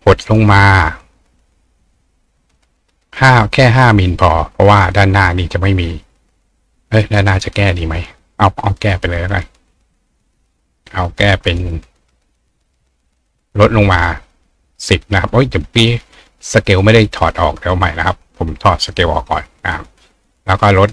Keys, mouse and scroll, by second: 2.5 click, 3.8 click, 13.1 click, 17.7 click, 18.9 click, 20.5 click.